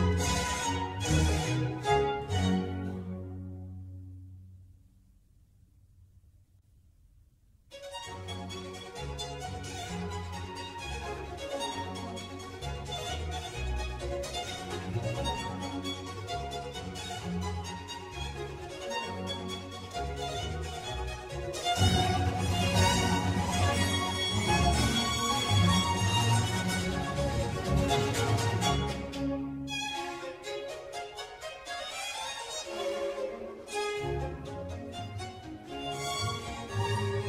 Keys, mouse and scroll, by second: 8.0 click, 8.3-11.3 middle drag, 11.8 scroll up 1, 12.0-12.5 shift+middle drag, 12.5-13.4 scroll up 1, 13.4 click, 13.8 scroll down 1, 14.1-15.9 middle drag, 15.9-17.4 scroll up 1, 17.4 click, 17.8-18.7 middle drag, 18.7 click, 19.1-20.0 middle drag, 20.0 s, 23.0 scroll up 1, 23.8 s, 27.7-28.7 middle drag, 28.7 click, 28.9-30.5 middle drag, 30.5 scroll down 1, 30.7-32.1 middle drag, 32.1 click, 32.7 s, 35.4 click, 35.7-37.2 middle drag.